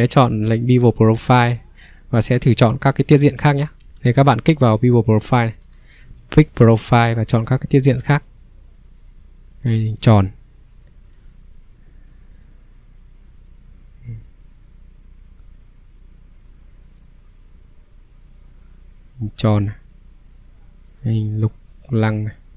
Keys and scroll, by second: 3.8 ctrl+3, 6.7 Escape.